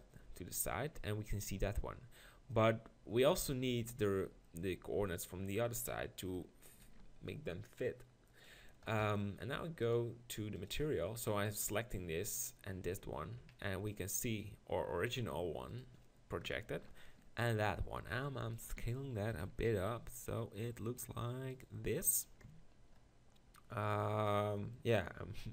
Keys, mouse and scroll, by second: 4.2-6.1 middle drag, 6.8 ctrl+l, 9.8 click, 10.5 click, 16.8 ctrl+l, 18.0 s, 18.8 g, 19.5 s, 22.0 click, 22.5 Tab.